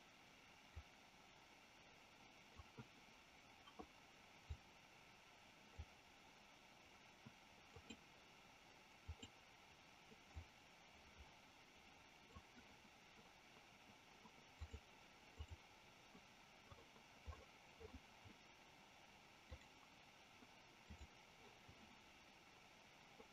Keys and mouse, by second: 0.7-2.6 drag, 4.6-5.8 drag, 7.7 click, 9.2 click, 10.3-12.5 drag, 14.7 click, 15.3 click, 19.6-21.1 drag.